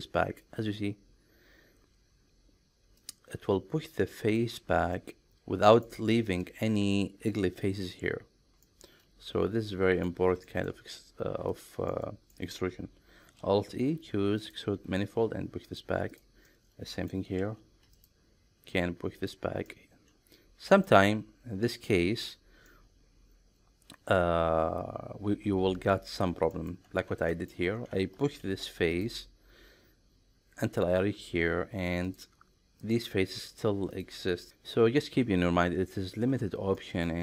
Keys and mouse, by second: 3.0 click, 3.9 middle click, 4.9 middle click, 5.7 middle click, 8.6-10.0 middle drag, 10.4 shift+middle click, 11.5 click, 11.9 middle click, 13.3 alt+e, 15.6 click, 16.1 click, 16.5-17.1 middle drag, 17.4 alt+e, 19.2 click, 19.7-20.9 middle drag, 22.7-24.1 middle drag, 26.5 middle click, 26.9 ctrl+z, 27.3 middle click, 28.4 alt+e, 32.1 click, 32.8 click, 33.9 click, 34.4 middle click, 36.7 middle click.